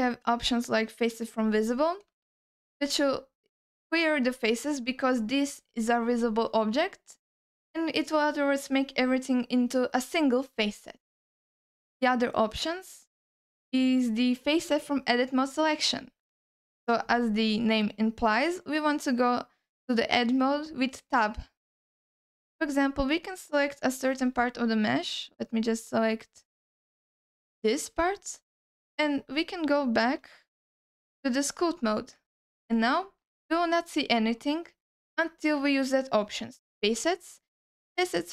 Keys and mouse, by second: 2.2 ctrl+alt+middle click, 2.7-4.1 alt+middle drag, 6.7 ctrl+alt+middle click, 8.9-9.9 drag, 10.6 click, 11.4-16.1 drag, 17.5 middle click, 18.8 Tab, 21.7 alt+middle click, 22.5 ctrl+alt+middle click, 23.1 alt+middle click, 24.2 c, 30.8-31.6 drag, 32.2 ctrl+alt+middle click, 32.6 alt+middle click, 34.1 middle click, 36.6-38.3 drag.